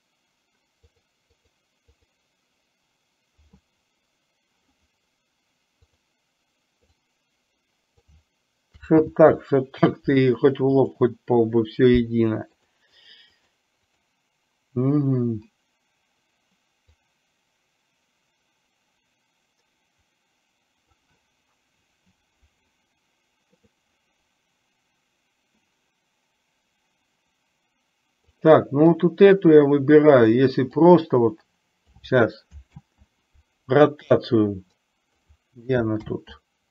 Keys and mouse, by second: 1.0 click, 1.5 click, 5.8 click, 7.0 click, 7.3 click, 9.1 ctrl+z, 11.0 click, 12.6 drag, 13.1 drag, 13.5 click, 17.0-21.0 drag, 28.3 click, 31.0-32.1 drag, 32.8 ctrl+z, 34.3-35.3 drag, 36.1 ctrl+z.